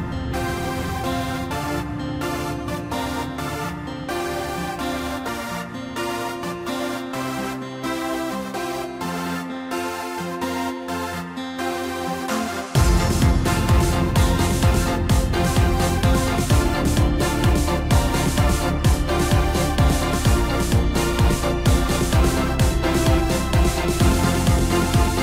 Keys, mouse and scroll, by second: 1.3 KP_3, 1.9 scroll down 2, 2.7 e, 4.7 middle click, 5.3-6.1 scroll up 1, 7.7 KP_1, 9.9 e, 11.3-11.9 scroll down 2, 11.9 s, 13.2-15.3 middle drag, 15.3 scroll up 1, 15.5 scroll down 2, 15.7-17.1 middle drag, 17.1 KP_Divide, 17.8-20.4 middle drag, 20.4 Tab, 20.8-22.2 middle drag, 22.2 KP_7, 23.0-24.2 scroll down 2, 24.2-25.2 drag.